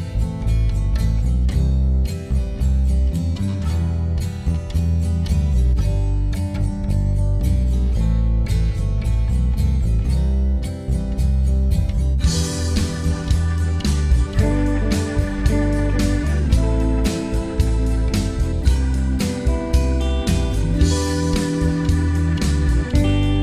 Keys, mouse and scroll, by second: 0.0-1.3 alt+drag, 1.3 alt+middle click, 1.6 scroll up 1, 1.9 click, 3.6-9.6 drag, 9.6 alt+middle click, 9.8 alt+click, 10.1 alt+middle click, 10.2 alt+click, 10.3 alt+middle click, 10.4 scroll up 2, 10.5 alt+middle click, 10.7 f, 10.9 click, 11.7 right click, 11.9 alt+click, 12.1 alt+middle click, 12.2 right click, 12.4 click, 12.8 right click, 12.9 alt+click, 13.2 alt+middle click, 13.4 right click, 13.6 click, 14.0 ctrl+z, 14.1 ctrl+right click, 14.4 alt+middle click, 14.5 click, 14.7 alt+middle click, 14.8 click, 15.3 alt+middle click, 15.4 click, 15.6 alt+middle click, 15.7 click, 15.8 alt+middle click, 16.4 ctrl+right click, 16.7 alt+middle click, 16.8 click, 17.2 alt+middle click, 17.5-18.5 ctrl+right drag, 18.5 alt+middle click, 18.8 click, 19.1 alt+middle click, 19.7 click, 20.3 alt+middle click, 20.4 ctrl+right click, 20.8 alt+click, 21.0 alt+middle click, 21.4 click, 21.7 alt+middle click, 21.9 alt+click, 22.0 alt+middle click, 22.3-23.4 right drag.